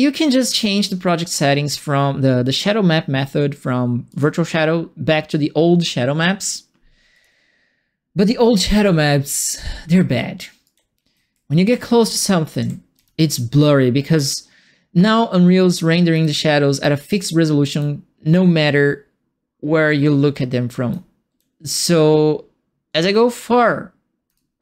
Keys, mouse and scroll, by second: 0.7 click, 4.0 click, 7.1 click, 9.2 click, 10.6-13.3 right drag, 10.7-12.9 typing, 16.1-24.3 right drag, 16.2 s, 17.7 s, 21.3 s.